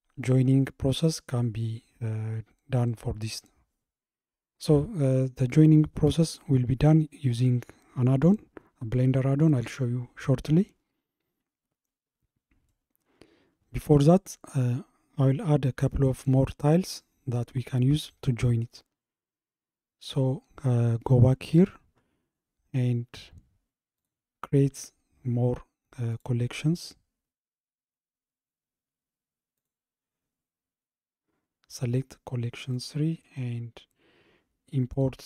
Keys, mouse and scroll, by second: 12.1 scroll down 2, 12.7-15.8 middle drag, 17.4-19.9 middle drag, 19.9-22.0 scroll up 34, 22.0-24.0 middle drag, 22.0-24.0 scroll up 15, 24.0 click, 24.8-27.9 right drag, 29.6 click, 32.8-35.2 drag.